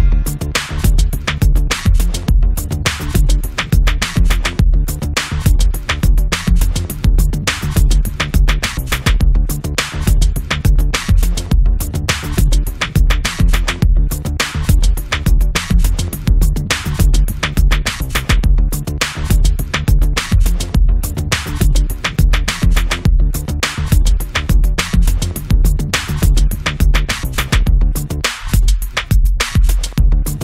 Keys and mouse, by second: 3.0-5.9 drag, 6.1-8.4 drag, 8.6 middle click, 8.7-20.2 drag, 11.1-15.3 middle drag, 15.5 middle click, 20.2 f, 20.4-25.0 drag, 21.9-27.2 middle drag, 21.9-25.0 right drag, 25.7-27.2 drag, 25.7-27.2 right drag, 27.9 ctrl+s, 28.8 click, 29.2 alt+F3, 29.6 click, 29.6 right click, 30.3 right click.